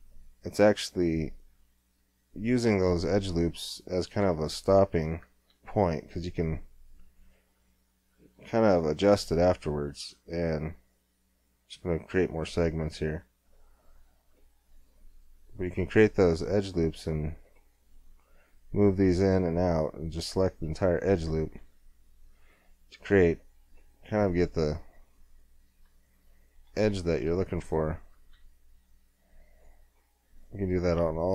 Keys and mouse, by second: 3.1 Tab, 4.6-6.5 drag, 5.4 g, 10.1-12.0 drag, 12.1-13.3 middle drag, 13.3 z, 14.7 g, 21.0 click, 21.6 g, 25.5-26.7 drag, 28.1-29.5 middle drag, 28.4 g, 29.5 click.